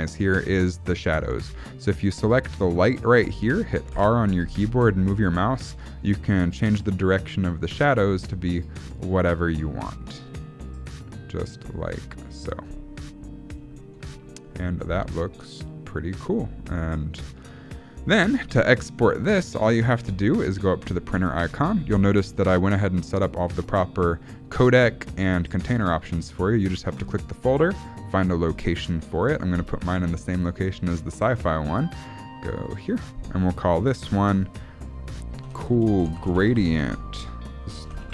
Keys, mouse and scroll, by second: 2.7 click, 4.0 r, 13.5-14.5 scroll up 5, 13.8 shift+middle click, 14.5 shift+middle click, 14.9-15.3 scroll down 6, 15.3 shift+middle click, 20.9 click, 21.7-23.9 scroll down 9, 27.0 click.